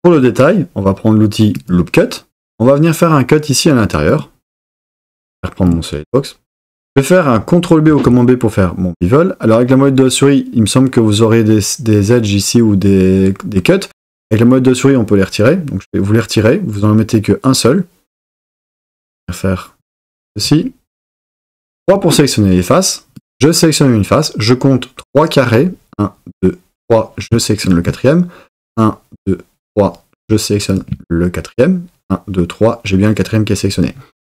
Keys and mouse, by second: 1.6 click, 4.1 click, 5.6 click, 7.9 super+b, 19.9 click, 21.8 3, 23.1 click, 27.6 shift+click.